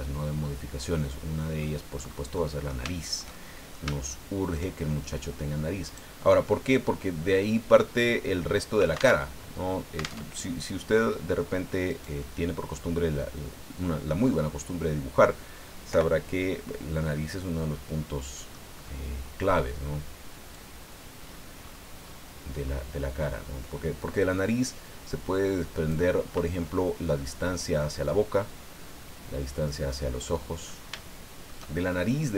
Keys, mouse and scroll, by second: 0.4-1.8 drag, 1.9-2.3 scroll up 2, 2.3-4.7 drag, 5.9 right click, 6.4-9.2 middle drag, 9.2 alt+Tab, 10.2 alt+Tab, 11.9-14.2 right drag, 12.2-14.2 drag, 14.3-15.4 middle drag, 15.9 o, 17.0-18.7 middle drag, 18.7 scroll up 1, 20.5 click, 21.2-23.0 scroll up 4, 24.6-24.9 scroll down 1, 27.0 click, 28.0-29.7 drag, 29.9 click, 31.0 shift+middle click.